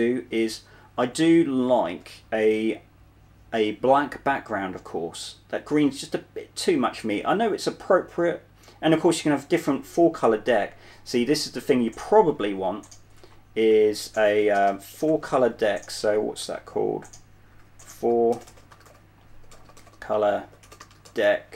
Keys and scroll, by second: 2.2 super+2, 11.9 super+1, 12.8 Up, 13.5 Up, 14.0 Down, 14.9-15.4 typing, 21.0-21.5 typing.